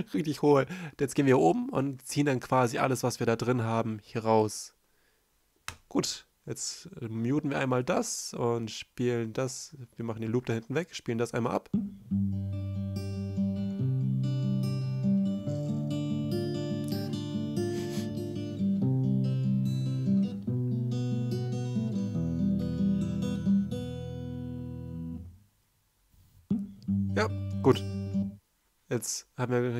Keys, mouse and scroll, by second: 8.3 s, 9.4 shift+m, 10.6-11.5 typing, 16.2 ctrl+i, 17.8 space, 17.9 c.